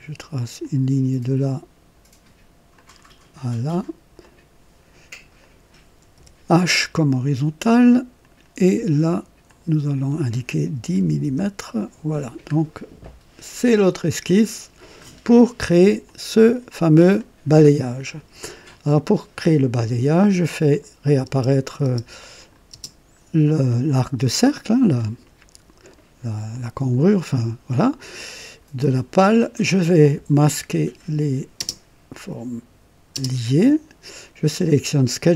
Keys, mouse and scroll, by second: 0.5 click, 2.7 click, 3.4 right click, 4.2 right click, 5.3 click, 6.1 h, 8.1 click, 9.4 click, 10.7 KP_1, 11.1 KP_0, 11.2 Return, 12.4 scroll up 2, 13.0 right click, 14.2 click, 15.0 scroll down 1, 16.0-16.8 drag, 17.0 click, 17.6-18.3 drag, 17.8 typing, 20.6 click, 21.2-22.7 typing, 22.3 click, 23.6-25.1 drag, 25.8 right click, 26.5 click, 28.1 click, 30.6 click, 31.5-33.1 typing, 32.0 click, 34.5 click.